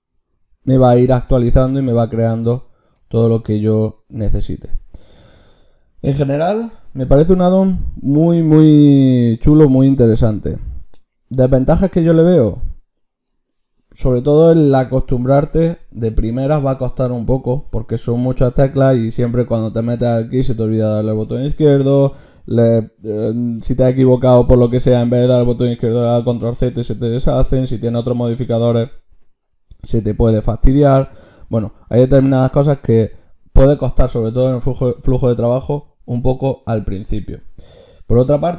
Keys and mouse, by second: 6.9 ctrl+shift+q.